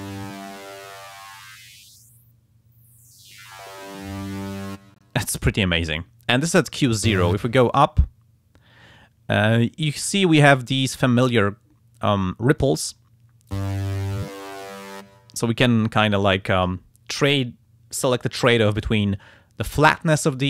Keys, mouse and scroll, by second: 7.6-13.0 drag, 14.1-15.1 drag.